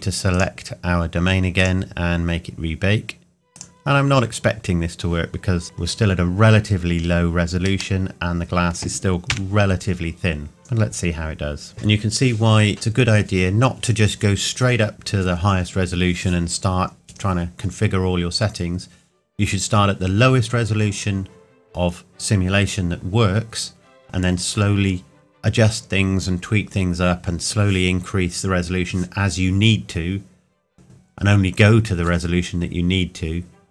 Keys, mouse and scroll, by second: 0.3 click, 5.6-6.9 scroll down 1, 8.0 middle click, 9.3 KP_1.